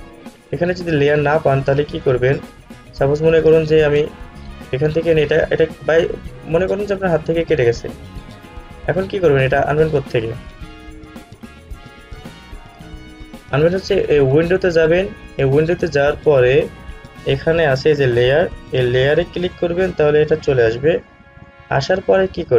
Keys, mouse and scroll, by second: 2.1-7.8 drag, 7.8 click, 19.6-22.5 drag.